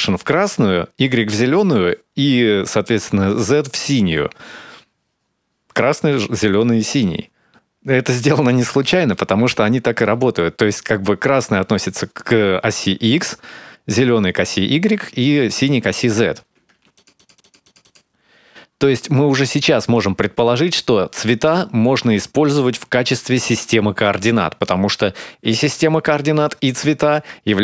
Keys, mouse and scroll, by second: 16.9 ctrl+shift+click.